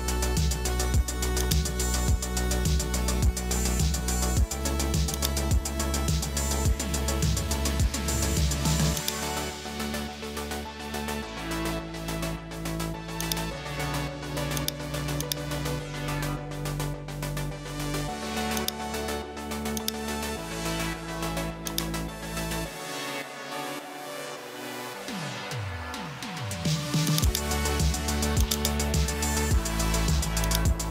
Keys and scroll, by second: 2.6 super+s, 6.8 super+s, 25.0 Return.